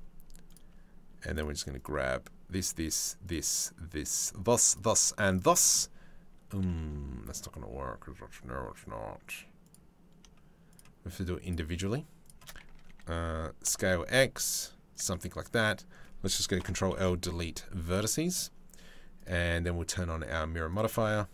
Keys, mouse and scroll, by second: 2.2 shift+click, 2.8 shift+click, 3.7 shift+click, 4.9 shift+middle click, 5.2 middle click, 6.2 middle click, 13.2 s, 16.2 ctrl+l, 16.5 Delete, 18.8-20.4 drag, 20.6 middle click, 21.0 a.